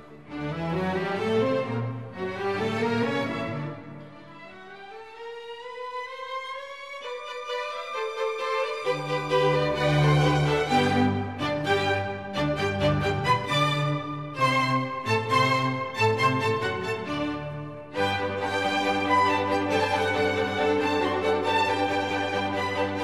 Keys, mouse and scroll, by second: 4.1 double click, 10.6 ctrl+-, 11.0 ctrl+-, 22.4-23.0 scroll up 20.